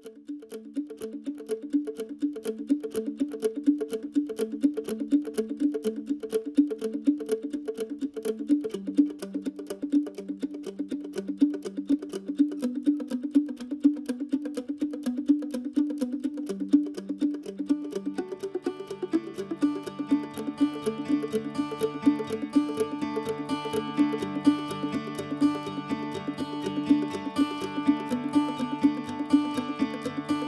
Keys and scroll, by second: 1.7 ctrl+z.